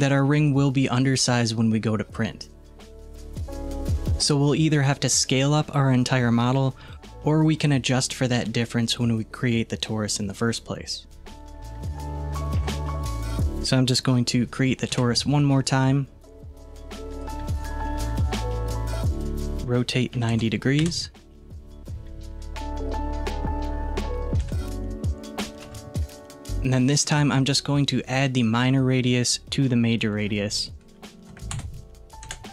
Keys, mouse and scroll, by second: 6.2 click, 6.9 s, 12.6 alt+z, 13.3 click, 14.8 Delete, 15.8 shift+a, 19.2-22.3 drag, 24.5 KP_1, 25.7 alt+z, 30.2-32.5 drag.